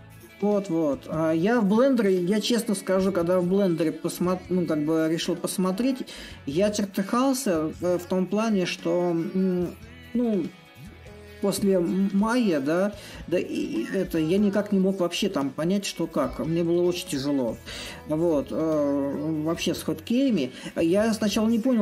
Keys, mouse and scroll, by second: 0.0-5.0 middle drag, 5.5-6.6 middle drag, 6.6-10.5 drag, 11.4-16.5 drag, 16.8-21.1 drag, 21.1 middle click.